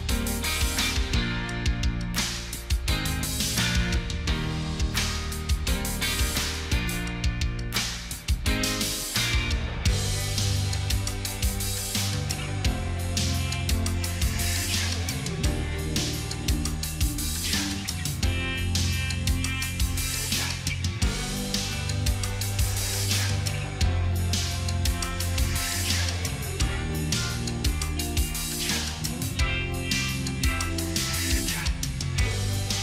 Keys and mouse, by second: 0.0 Return, 0.9 j, 1.2 u, 1.3 n, 4.0 ctrl+click, 6.5 ctrl+t, 14.0 double click, 15.4 double click, 16.6 click, 17.0 ctrl+d, 19.4 ctrl+click, 24.1 ctrl+d.